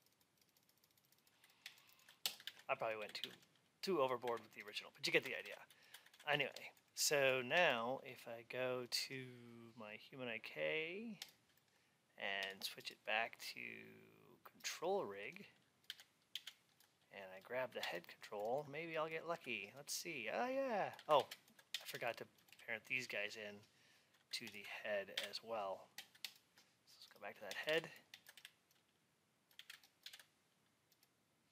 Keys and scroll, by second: 2.3 alt+x, 5.3 ctrl+a, 15.8 alt+x, 21.1 alt+x, 27.6 alt+x.